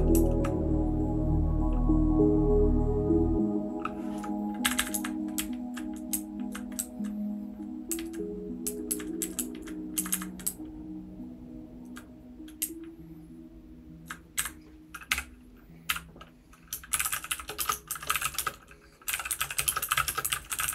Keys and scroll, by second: 0.0-0.1 typing, 4.6 Up, 4.7 Up, 4.9 Up, 5.3 Down, 6.1 Up, 6.7 Down, 7.9 Down, 8.6 Down, 8.9 Down, 9.2 Down, 9.3 Down, 9.5 Down, 9.9 Up, 10.1 Up, 10.4 Down, 10.9-11.8 Down, 12.6 Up, 13.1-14.0 Up, 14.3 Up, 15.1-20.7 typing.